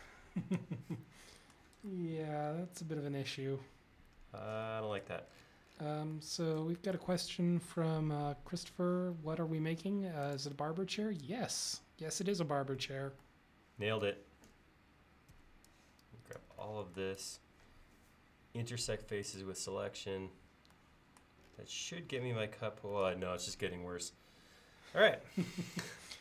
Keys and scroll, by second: 15.4 space.